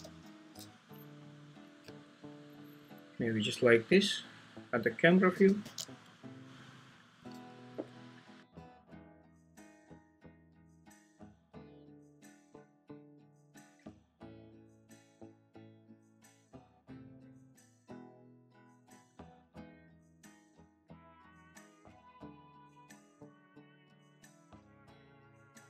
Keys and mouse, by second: 1.8 ctrl+`, 3.8 `, 5.6 g, 5.6 z, 7.3 click, 7.7 r, 9.3-10.8 drag, 13.0 alt+`, 14.0 r, 15.3 Escape, 15.6 `, 16.4 r, 17.7 click, 25.2 g, 25.5 z.